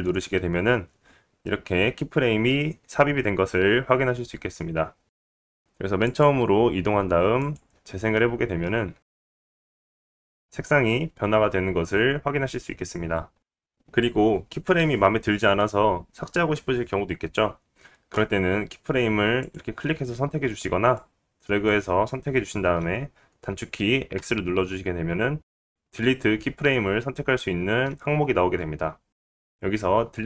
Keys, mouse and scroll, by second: 7.2-11.6 drag, 12.8 space, 13.4-20.6 drag, 20.7-22.1 drag, 25.4 x.